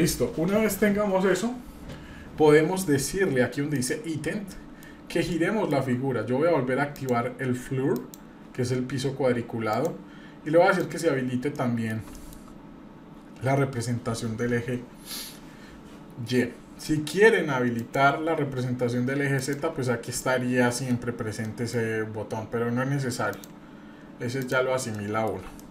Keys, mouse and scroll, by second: 3.7 click, 4.5 middle click, 5.3-5.9 shift+middle drag, 6.9-8.4 drag, 9.7-11.2 drag, 11.5-11.9 middle drag, 12.1 shift+middle drag, 17.8-19.8 drag, 19.9-20.6 scroll down 2, 20.2-20.9 middle drag, 21.4 middle click, 23.3-24.7 drag, 24.9-25.3 middle drag, 25.3 scroll down 1, 25.5-25.7 shift+middle drag.